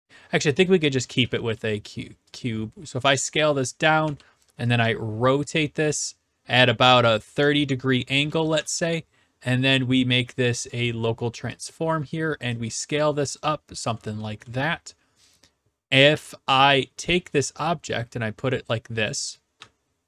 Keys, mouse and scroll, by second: 0.6-2.0 typing, 1.1-2.2 right drag, 3.8 click, 4.0 typing, 7.3 ctrl+click, 8.2-9.0 typing, 11.6 click, 13.3-14.4 drag, 14.2 s, 14.4-15.6 right drag, 16.0-17.0 drag, 16.1 w, 19.1 click, 19.4-20.0 typing.